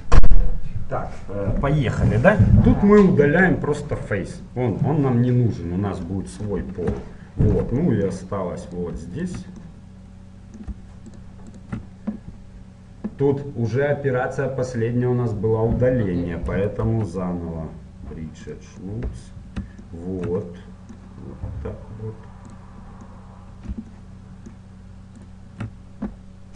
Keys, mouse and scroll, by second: 5.0-6.9 middle drag, 7.1-8.7 middle drag, 8.7-13.5 right drag, 10.0 middle click, 10.2-11.6 middle drag, 16.9 ctrl+e, 19.0-22.7 middle drag, 22.7-24.3 right drag, 23.1-25.3 middle drag, 25.3-26.5 right drag.